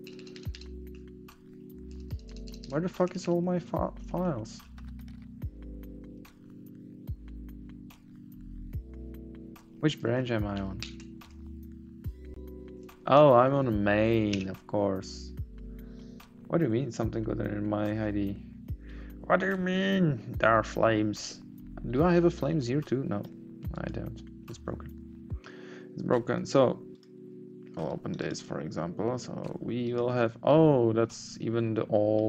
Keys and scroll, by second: 0.9 Down, 1.3 Up, 3.0 Up, 3.2 Right, 4.0 Up.